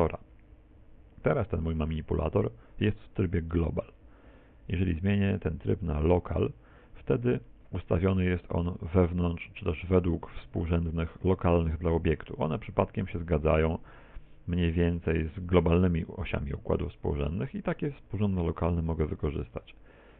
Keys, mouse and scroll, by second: 4.4 click, 8.1 middle click, 9.3 middle click, 13.1 middle click, 14.0 middle click, 17.8 middle click.